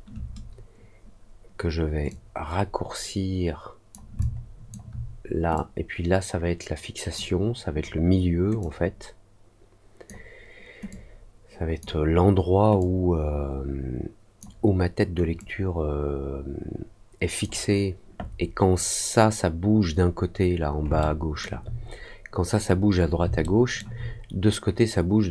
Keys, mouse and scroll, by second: 2.0-3.8 drag, 4.1 alt+click, 5.5-7.1 drag, 8.5-10.0 drag, 10.8 click, 12.7-14.3 drag, 15.3-17.3 drag, 20.9 alt+middle click, 23.3 alt+middle click.